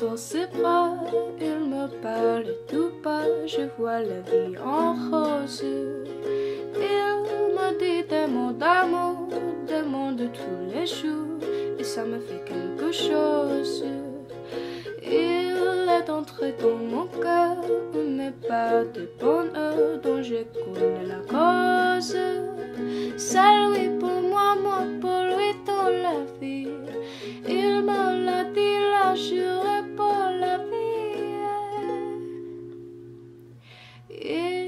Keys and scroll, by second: 0.7 ctrl+shift+d, 4.5-5.8 typing, 7.8-8.5 typing, 15.7-18.9 typing, 23.9 u.